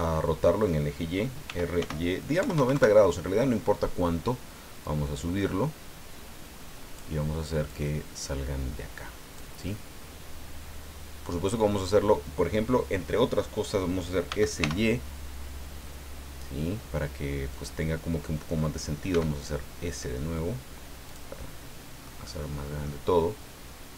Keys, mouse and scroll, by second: 1.4 r, 1.8 y, 2.5 KP_0, 2.7 KP_Enter, 4.8-7.1 drag, 7.7-9.5 drag, 9.6-11.4 middle drag, 14.3 s, 14.6 y, 17.5 click, 19.1 s, 21.0 click, 21.4-23.0 middle drag.